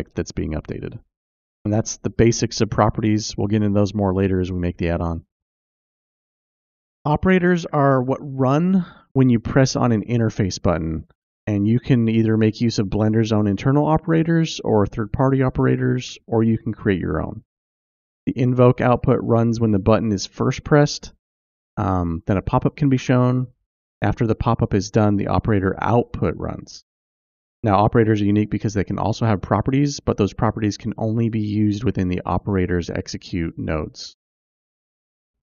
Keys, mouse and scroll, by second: 6.2 click, 30.4 shift+a.